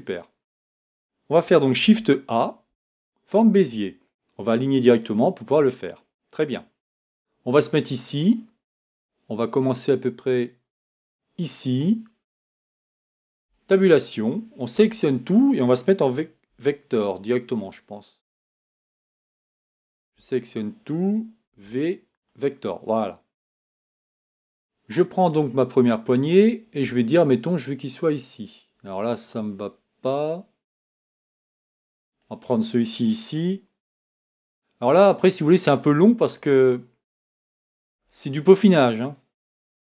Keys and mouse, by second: 1.8 shift+a, 13.4 Tab, 14.8 a, 16.5 v, 20.1 a, 21.5 v, 25.3 right click, 32.1-33.8 right drag, 33.8 g, 37.9 e.